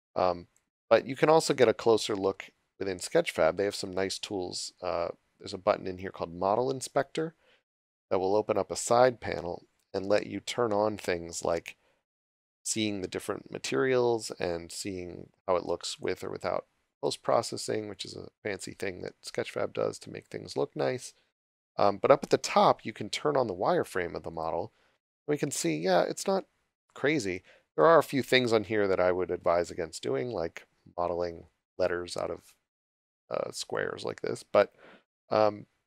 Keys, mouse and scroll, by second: 2.6 scroll up 1, 8.4 scroll up 1, 15.9 click, 24.3 click, 27.7 shift+middle click, 29.8-30.2 scroll up 1, 33.9 click, 34.8-35.6 scroll down 1.